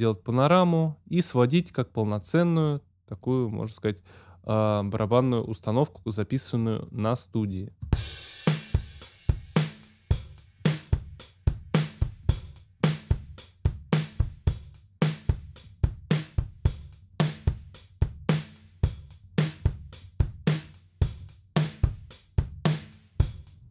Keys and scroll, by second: 7.8 space.